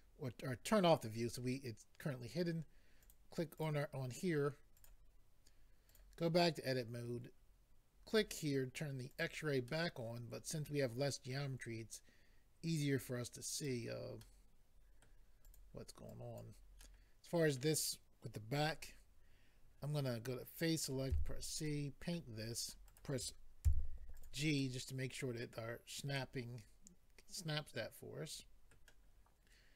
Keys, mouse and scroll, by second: 3.0 click, 3.5 click, 3.6 double click, 4.7 double click, 5.9 click, 8.1 click, 9.1 click, 10.5 click, 11.3 middle click, 13.0 click, 14.2 middle click, 15.4 click, 16.1 click, 16.8 middle click, 20.8 click, 21.1 c, 21.6 click, 22.9 right click, 23.6 g, 24.2 click, 24.6 middle click, 26.1 middle click.